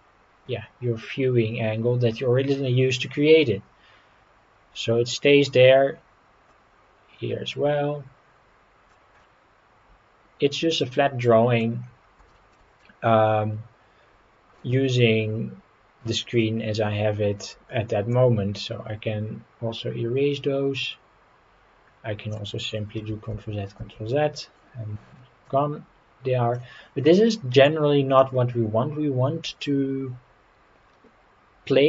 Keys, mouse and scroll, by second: 6.5-8.9 drag, 9.2-11.6 middle drag, 11.8-12.2 scroll down 2, 12.3 shift+middle click, 12.8 middle click, 13.4 scroll up 2, 14.3 scroll up 1, 14.6-16.4 drag, 18.1-22.3 drag, 23.0 ctrl+z, 23.4 ctrl+z, 23.8 ctrl+z, 25.5-26.7 drag, 27.3 middle click, 28.0 scroll up 1.